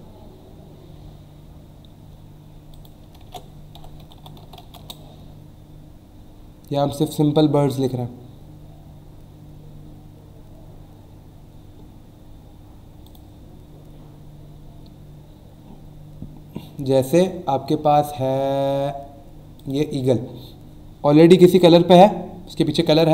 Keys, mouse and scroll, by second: 0.4 scroll down 1, 1.0 scroll down 1, 2.7 click, 3.2 ctrl+a, 3.5-5.1 typing, 8.2 scroll down 1, 9.0 scroll down 1, 9.8 scroll down 1, 10.3 scroll down 1, 10.9 scroll down 1, 13.0 click, 14.0 scroll down 1, 14.6 scroll down 1, 19.6 click, 22.8 right click.